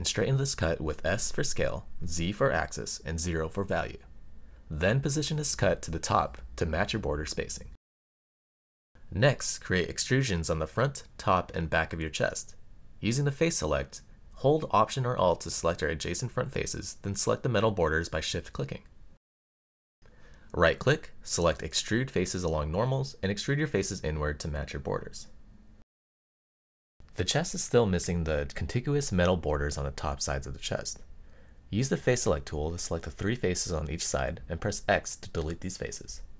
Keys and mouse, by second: 1.8 alt+click, 2.8 s, 3.4 z, 4.1 KP_0, 4.4 Return, 6.4 g, 12.1 click, 14.2 alt+click, 14.8 middle click, 16.2 shift+click, 17.0 shift+click, 17.5 middle click, 22.1 right click, 25.1 click, 25.5-26.7 middle drag, 27.1 click, 29.2 middle click, 31.3 x, 33.6 middle click, 36.0 shift+click.